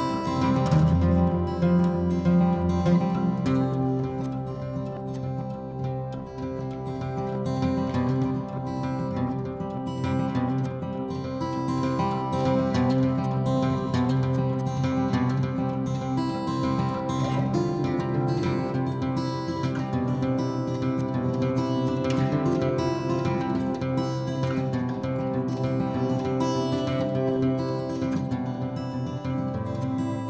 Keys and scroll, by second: 26.3-27.2 typing, 28.4-29.5 typing.